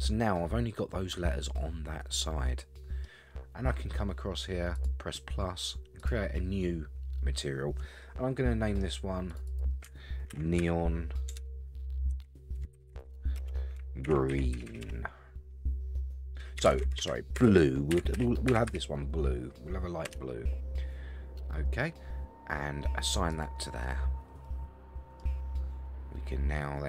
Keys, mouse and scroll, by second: 4.7 click, 6.0 click, 9.3 click, 9.5-20.3 drag, 14.7 e, 16.7 BackSpace, 16.8 BackSpace, 23.3 click, 24.4 middle click.